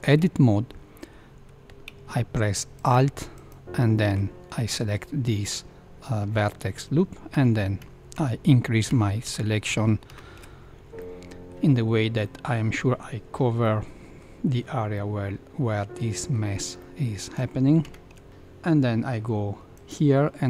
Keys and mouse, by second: 2.7 alt+click, 3.3 alt+click, 7.3 ctrl+KP_Add, 7.8 ctrl+KP_Add, 8.1 ctrl+KP_Add, 8.8 ctrl+KP_Add, 9.2 ctrl+KP_Add, 9.6 ctrl+KP_Add, 10.0 ctrl+KP_Add, 10.9 middle click, 12.2 middle click, 13.6 middle click, 14.9-16.3 middle drag, 16.8 middle click, 17.8 ctrl+KP_Add.